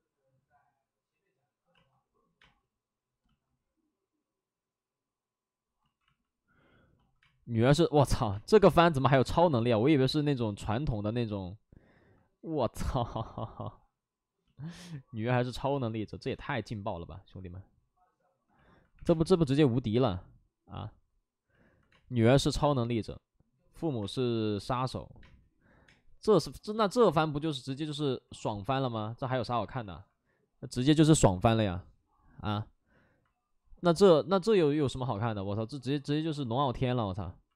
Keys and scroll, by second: 1.7 space, 2.3 space, 5.8 ctrl+z, 7.1 space, 8.2 space, 10.8 2, 13.0 3, 18.9 3, 18.9 space, 19.9 space, 21.8 space, 23.9 space, 25.1 space, 25.8 space, 28.2 ctrl+z, 35.2 x, 37.5 2.